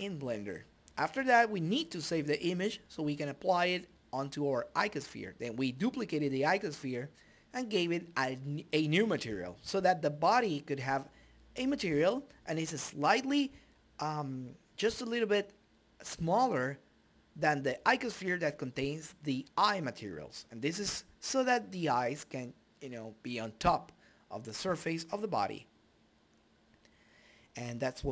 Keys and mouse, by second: 11.2-19.4 drag, 22.8 click.